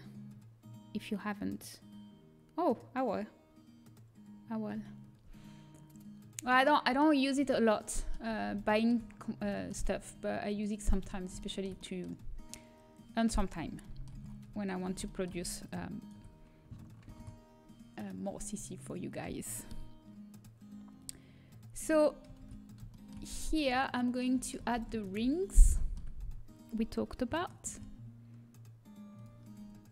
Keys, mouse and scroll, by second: 5.6-6.8 middle drag, 7.2-8.3 middle drag, 8.7 middle click, 9.4 middle click, 9.8 middle click, 11.7-15.0 middle drag, 16.0-18.7 right drag, 18.7 ctrl+b, 21.8-24.1 middle drag, 22.5 ctrl+z, 24.1 right click, 24.6 ctrl+z, 28.1 ctrl+b.